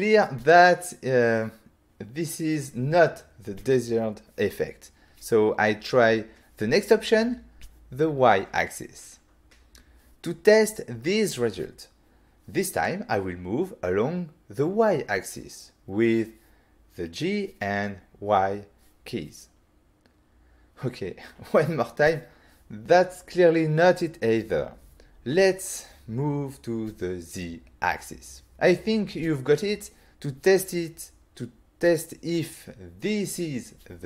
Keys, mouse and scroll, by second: 5.8 right click, 7.7 click, 9.5 click, 11.9 g, 13.1 y, 23.3 right click, 26.8 click, 29.6 click, 31.1 click.